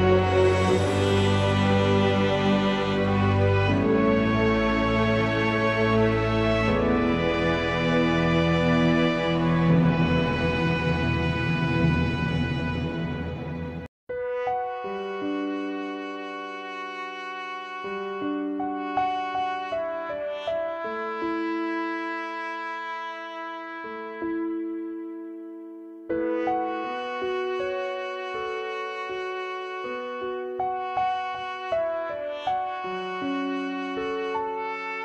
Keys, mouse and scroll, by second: 0.7-2.1 drag, 3.9 click, 4.5-7.1 scroll down 1, 7.1-10.1 drag, 11.0 click, 12.3 click, 13.3-13.9 scroll up 2, 13.9-16.4 middle drag, 17.6-20.7 middle drag, 20.8-26.4 middle drag, 29.4 click, 31.4 click, 32.7 s.